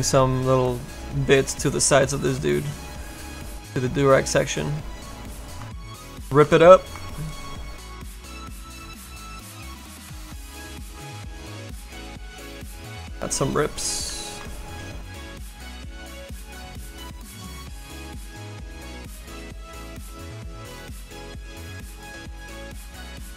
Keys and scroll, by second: 8.4 s.